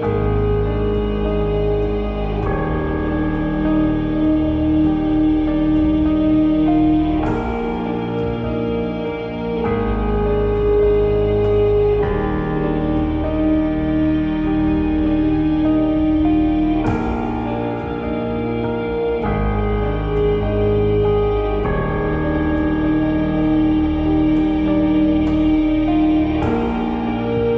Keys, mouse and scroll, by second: 2.7 middle click, 4.9-8.8 drag, 8.8 n, 13.3-27.5 drag.